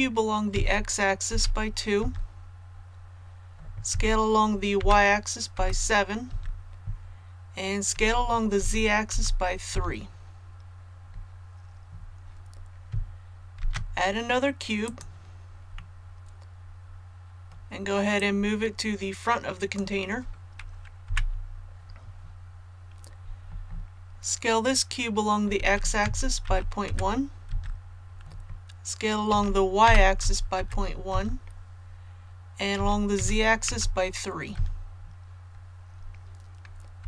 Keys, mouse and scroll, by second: 0.5 x, 1.2 KP_2, 3.8 s, 4.7 y, 5.5 KP_7, 7.9 s, 8.5 z, 9.0 KP_3, 13.5 shift+a, 14.7 click, 15.7-17.5 middle drag, 18.1-20.5 drag, 21.0 KP_1, 25.5 s, 25.9 x, 26.4 KP_Decimal, 26.8 KP_1, 29.2 s, 29.8 y, 30.1 KP_Decimal, 30.5 KP_1, 32.7 s, 33.1 z, 33.6 KP_3, 36.9 KP_7.